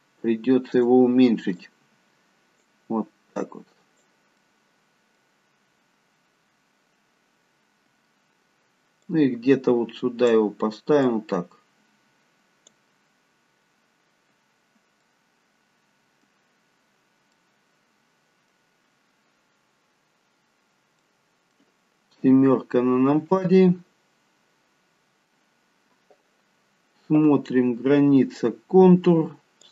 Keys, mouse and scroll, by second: 1.6 click, 3.4 click, 4.4 middle click, 9.1 click, 13.2 click, 13.2-13.8 scroll up 2, 13.8 scroll up 1, 14.0-15.1 scroll down 1, 15.1 middle click, 17.5 middle click, 19.3-19.7 scroll down 1, 20.5-21.1 scroll up 1, 21.1 middle click, 22.2 KP_7.